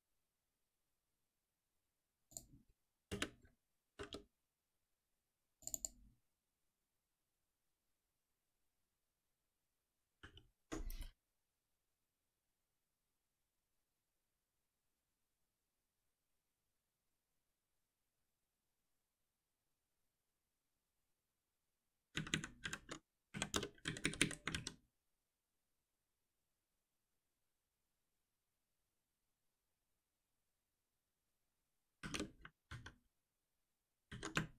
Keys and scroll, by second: 3.0 alt+Return, 10.2 ctrl+z, 22.1 ctrl+shift+Up, 30.3 ctrl+c, 32.6 ctrl+v.